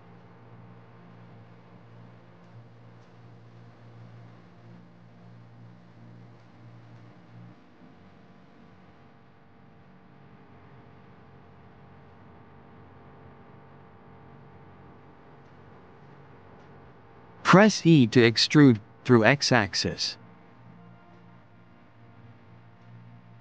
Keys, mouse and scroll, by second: 0.7 click, 2.7 click, 5.1 click, 7.3-9.1 drag, 12.4 e, 14.5 click, 15.7 ctrl+z, 18.1 Tab, 19.3 e.